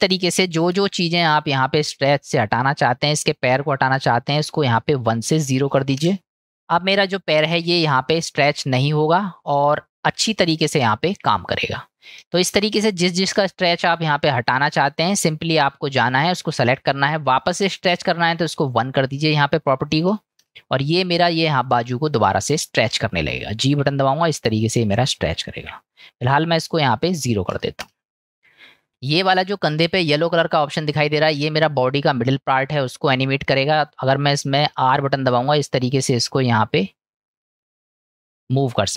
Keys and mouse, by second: 0.9-1.2 shift+middle drag, 4.9-6.3 drag, 10.9 ctrl+z, 12.4-12.7 shift+middle drag, 14.1 click, 19.3-20.7 drag, 25.6 ctrl+z, 26.7-28.3 drag, 29.4-30.9 middle drag, 31.9 middle click.